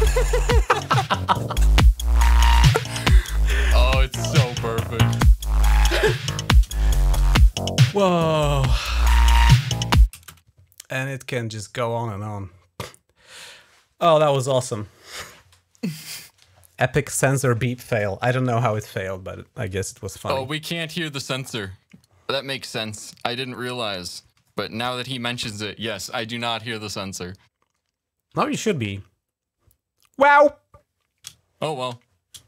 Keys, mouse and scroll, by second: 3.2-3.7 shift+scroll down 2, 5.0-5.4 shift+scroll down 3, 6.6 shift+scroll down 1, 8.7-9.1 scroll down 1, 10.1 space, 20.2-22.0 drag, 22.2 click, 23.4 click, 24.3 click, 24.9 click, 31.3 shift+scroll up 2, 32.3 scroll up 1.